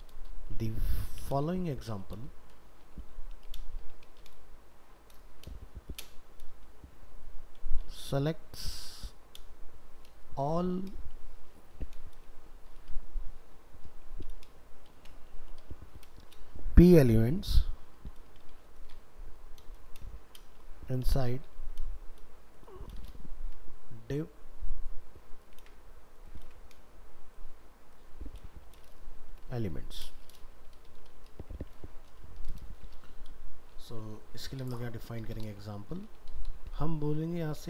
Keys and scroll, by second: 25.6 ctrl+c, 32.7 ctrl+s.